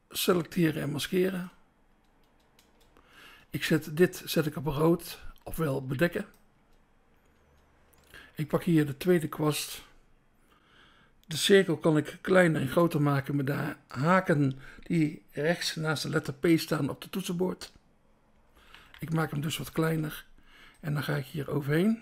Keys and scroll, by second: 0.8 BackSpace, 6.6 BackSpace, 10.0 BackSpace, 18.5 [, 19.1 [, 19.7 [.